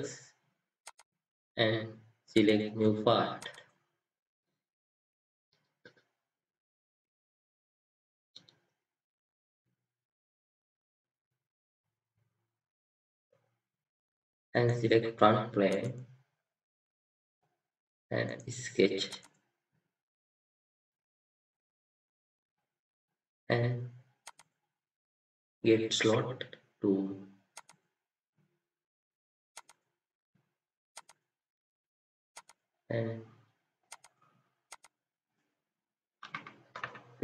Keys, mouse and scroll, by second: 14.5 scroll down 1, 14.6 right click, 18.2 right click, 36.2 typing.